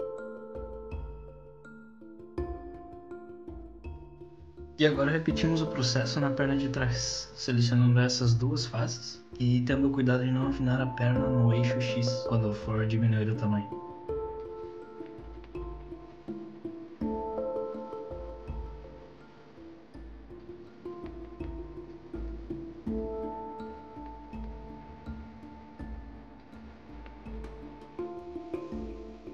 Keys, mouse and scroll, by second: 0.4 s, 2.2 middle click, 3.3-3.8 scroll down 2, 3.5 middle click, 4.3 KP_3, 4.8 middle click, 6.4 click, 7.2 shift+click, 8.5 KP_3, 9.8 e, 10.1 ctrl+z, 10.3 s, 11.7 g, 13.6 r, 15.5 e, 15.5 g, 16.6 s, 18.7 s, 20.4 e, 21.6 r, 22.3 g, 23.6 s, 26.4 scroll up 2, 26.7 shift+middle click.